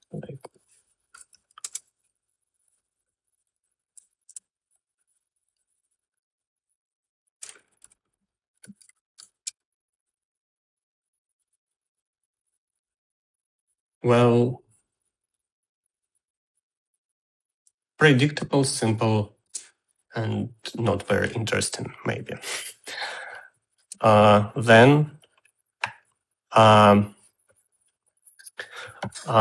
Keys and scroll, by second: 1.9-2.8 typing, 4.7 space, 7.9-10.7 typing, 20.8 space.